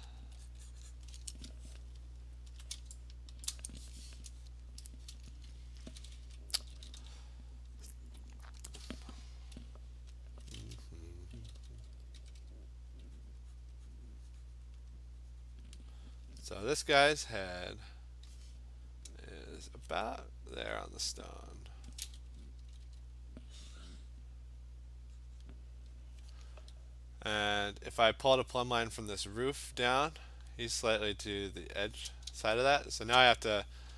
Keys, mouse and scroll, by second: 0.2 alt+click, 0.5 click, 0.7 click, 1.0 click, 2.0-2.6 scroll, 3.5 click, 4.2 scroll down 9, 5.9-6.9 typing, 7.7 click, 10.3 alt+click, 11.4-12.4 typing, 12.0 click, 12.9 click, 13.3 click, 13.6 click, 13.8 alt+click, 14.0 click, 14.3 alt+click, 14.8 click, 15.3 alt+click, 15.6 click, 21.5 click, 22.6 [, 22.8 [, 23.7 click, 25.4 click, 26.0 click, 29.3 click, 32.2-33.6 scroll, 33.0-33.6 click.